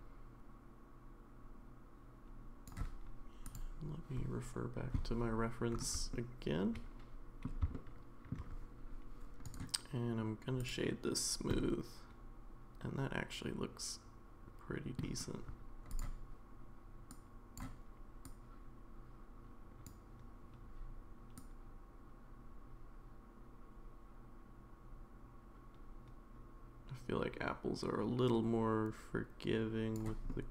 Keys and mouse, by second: 6.1-7.4 middle drag, 7.7-8.3 shift+middle drag, 9.6 right click, 11.6-15.0 middle drag, 15.9 click, 30.3-30.5 middle drag.